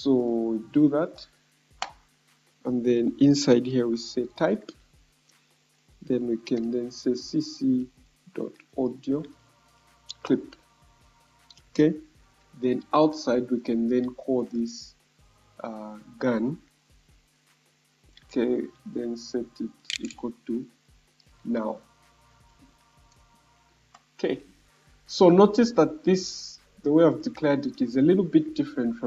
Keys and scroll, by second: 19.4 BackSpace, 19.5 =.